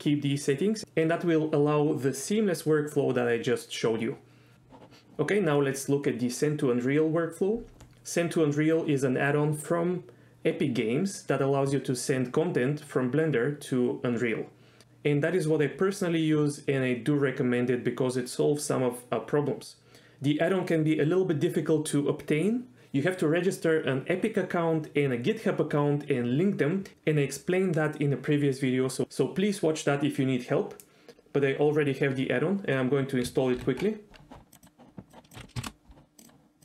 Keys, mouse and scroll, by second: 33.9 ctrl+alt+u.